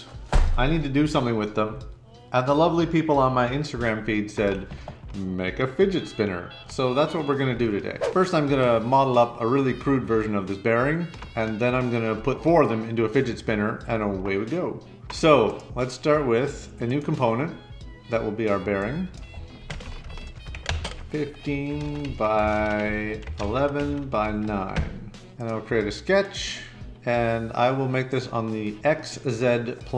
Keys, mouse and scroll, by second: 15.4 click, 16.8 click, 18.8 click, 19.0-24.8 typing.